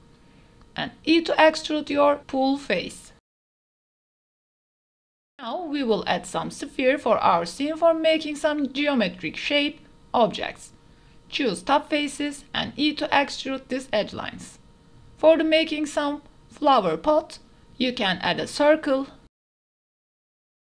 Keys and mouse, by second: 0.2 e, 4.1 click, 4.4 click, 4.8 Tab, 5.7-7.6 typing, 6.6 drag, 8.0 click, 8.2 Tab, 8.4 shift+click, 8.8 click, 9.1 KP_Decimal, 9.2 click, 9.5 click, 9.8 click, 9.9 x, 10.5 2, 10.7 ctrl+z, 10.9 s, 12.2 click, 12.5 KP_0, 12.9 e, 13.2 z, 14.2 click, 14.5 Tab, 14.5 shift+a, 14.7 KP_Decimal, 15.3 KP_Decimal, 15.6 middle click, 16.2 middle click, 16.4 g, 16.6 z, 17.2 click, 17.4 s, 18.0 click, 18.3 click, 18.4 Tab, 18.8-20.6 typing, 19.4 click, 19.8 click, 20.2 click.